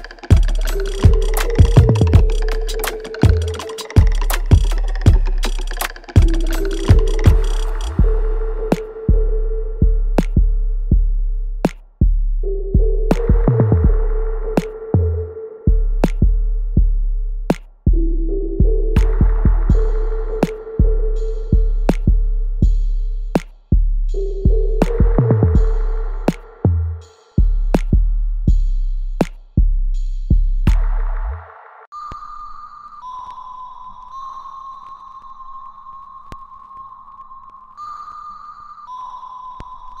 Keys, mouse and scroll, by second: 0.6 click, 1.8-2.4 scroll down 1, 2.4 click, 2.6 click, 3.4 space, 4.4-6.1 drag, 6.1 ctrl+s, 6.6 alt+middle click, 7.0 alt+click, 7.7 alt+middle click, 8.4 alt+click, 9.6 alt+right click, 10.1 alt+click, 10.6 click, 11.2-13.4 alt+drag, 13.4 click, 13.8 right click, 13.8 alt+right click, 14.4-17.8 alt+drag, 17.8 click, 18.2 alt+right click, 19.1 r, 19.6-22.8 drag, 22.8-24.7 right drag, 24.7 alt+click, 25.5 alt+middle click, 26.6 right click, 26.6 right click, 28.1-32.3 alt+drag, 32.8 click, 36.2 s, 36.7 click, 38.9-40.0 alt+right drag.